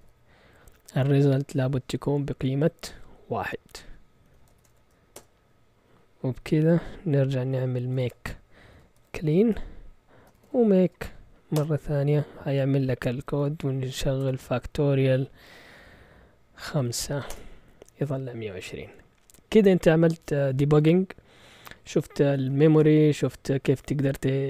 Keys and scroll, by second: 4.2 Escape, 4.3-5.2 typing, 7.5-11.5 typing, 13.3-14.5 typing, 16.8-18.0 typing.